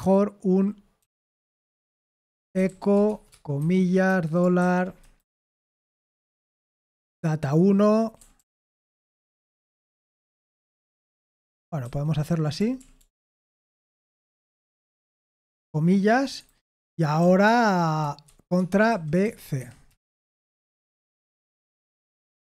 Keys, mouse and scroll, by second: 0.0-4.6 typing, 5.0 Delete, 5.3 Delete, 7.1 Right, 7.8 Right, 7.8 Right, 8.2 Right, 8.4 Right, 9.2-15.4 typing, 10.2 Escape, 16.2 Delete, 16.3 Escape, 17.1-22.4 typing, 19.5 Escape.